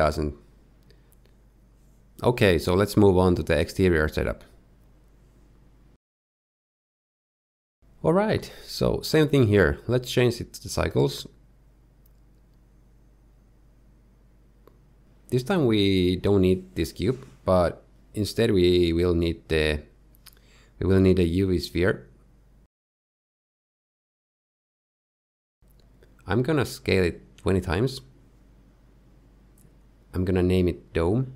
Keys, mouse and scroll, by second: 8.5 click, 9.7 click, 14.0 click, 15.5 click, 20.9 x, 21.6 shift+a, 26.1 KP_1, 26.7-27.5 scroll down 1, 27.5-28.1 scroll down 1, 27.5 s, 30.7 click.